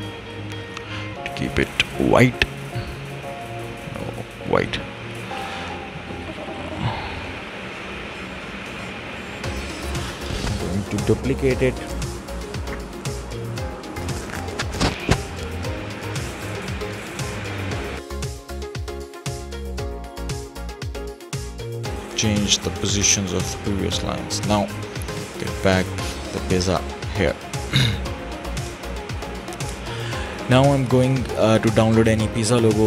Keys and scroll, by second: 11.8 ctrl+d, 13.2 ctrl+d, 20.0 Delete, 20.7 Delete, 21.3 Delete.